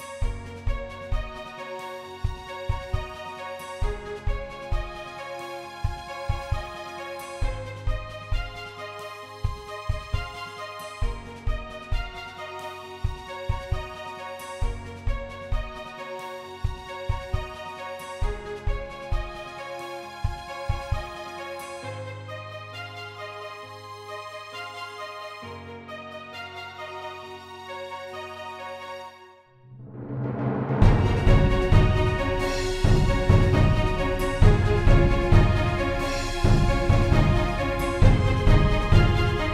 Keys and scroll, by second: 2.4 e, 4.8 e, 7.8 e, 8.9 shift+e, 9.4 e, 10.0 e, 11.1 e, 12.4 shift+e, 13.2 e, 19.0-22.7 typing, 23.9 shift+f, 26.7 shift+a, 27.3 shift+f, 30.4 a, 31.1 shift+f, 31.9 shift+f, 32.5 f, 33.6 shift+f, 35.2 a, 36.0 shift+a, 37.1 shift+a, 38.5 shift+d, 39.4 a.